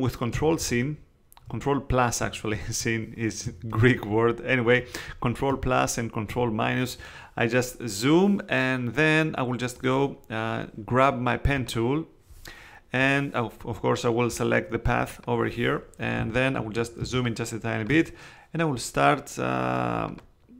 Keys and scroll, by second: 0.6 super++, 2.5 super++, 3.4 super+space, 6.3 super+-, 16.2 space.